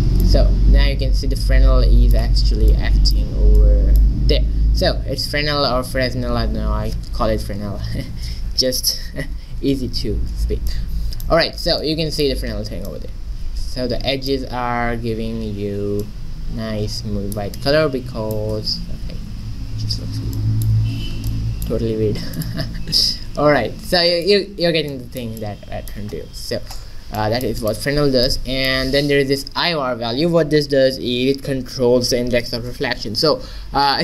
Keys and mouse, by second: 10.7-12.1 middle drag, 14.7 z, 15.6 middle click, 19.2 ctrl+2, 19.7 z, 21.0 shift+z, 22.2 x, 23.0 shift+a, 26.6 shift+z, 27.6 click.